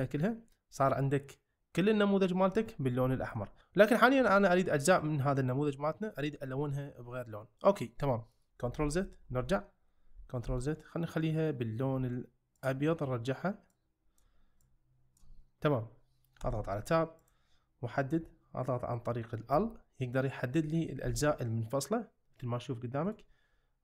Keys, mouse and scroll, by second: 3.1 shift+middle click, 8.8 ctrl+z, 9.4 ctrl+z, 12.5 click, 16.4 Tab, 17.2 click, 19.5 l, 21.1 g, 23.0 right click.